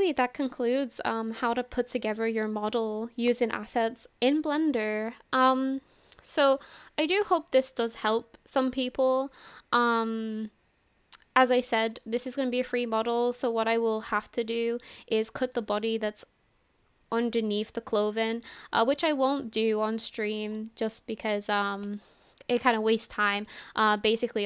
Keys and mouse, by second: 1.0-1.3 shift+middle drag, 2.1 shift+middle click, 14.3 shift+middle click, 15.3 shift+middle click, 19.3 shift+middle click, 20.1 shift+middle click.